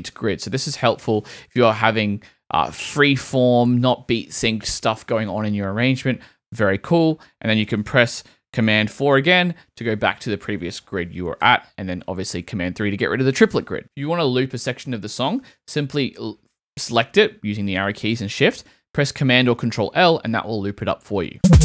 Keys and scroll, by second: 1.4 shift+Right, 9.3 super+4, 11.4 super+3, 15.7 shift+Right, 17.7 shift+Right, 18.7 shift+super+Right, 19.8 super+l.